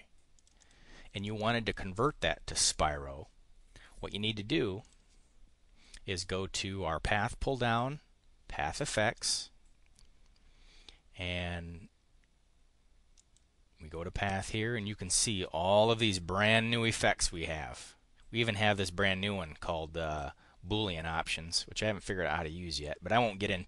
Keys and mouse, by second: 0.3 click, 0.5 click, 1.2 click, 1.9 click, 2.6 click, 4.8 click, 9.1 click, 13.1 click.